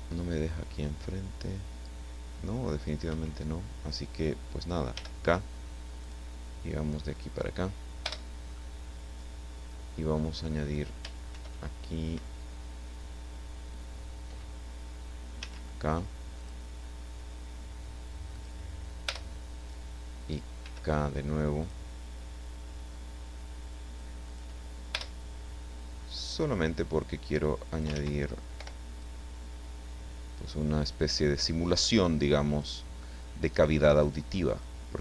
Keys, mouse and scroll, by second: 3.1 Escape, 4.9 k, 6.0 click, 7.2 click, 8.0 Return, 8.6-10.6 drag, 11.3 ctrl+r, 12.1 Escape, 15.4 k, 16.4 click, 18.4 click, 19.1 Return, 20.6 k, 21.6 click, 24.3 click, 25.0 Return, 26.2 right click, 27.0 click, 27.9 ctrl+z, 28.6 o, 29.0-30.7 drag, 31.8 click, 34.0 right click, 34.6-35.0 drag.